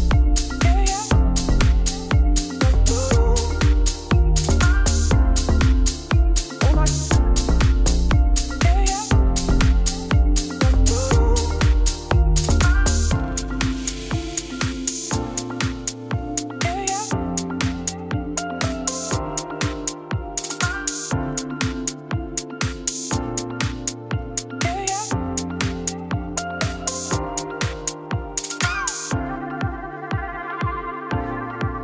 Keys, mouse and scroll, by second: 0.1 shift+middle click, 0.8 z, 4.8 shift+middle click, 5.4 e, 9.5 e, 15.7 e, 18.2 click, 18.6 middle click, 18.9 scroll down 2, 19.1 shift+middle click, 19.9 z, 20.2 z, 20.8 Tab, 21.8 scroll up 1, 22.0-25.6 shift+middle drag, 25.6-31.8 drag.